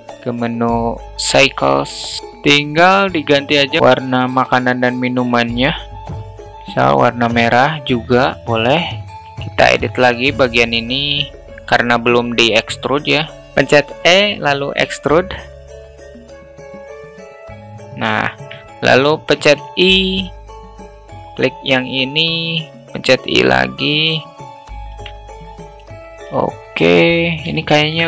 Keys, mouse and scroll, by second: 0.7 drag, 1.4 middle click, 4.3-5.1 middle drag, 5.4 middle click, 6.6-7.9 middle drag, 12.4 Tab, 13.3 a, 13.5 e, 14.1 s, 17.8 alt+middle click, 19.2 i, 22.1 i, 24.4 ctrl+z, 25.3 i, 26.1 Tab, 26.1 alt+middle click, 27.2 shift+middle drag.